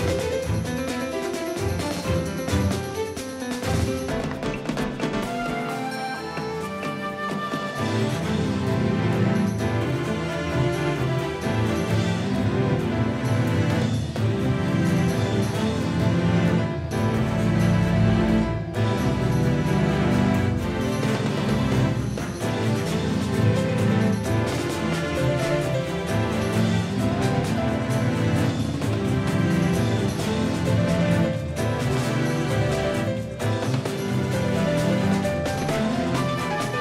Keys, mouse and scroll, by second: 1.3-5.9 drag, 2.4-4.9 right drag, 4.9 middle click, 5.9-7.2 middle drag, 18.4 ctrl+z, 19.7-22.0 middle drag, 26.8 ctrl+z, 27.4 ctrl+z, 28.6 ctrl+z, 31.2-32.3 drag, 34.2 ctrl+z, 34.3-35.6 drag, 35.6-36.8 middle drag.